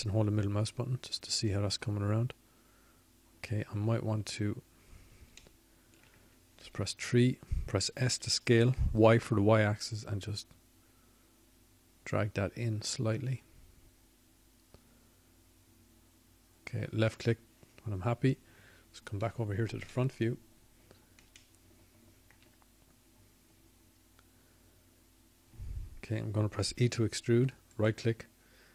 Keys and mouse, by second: 11.3-12.6 middle drag, 12.6 KP_3, 14.2 s, 23.5-26.0 drag.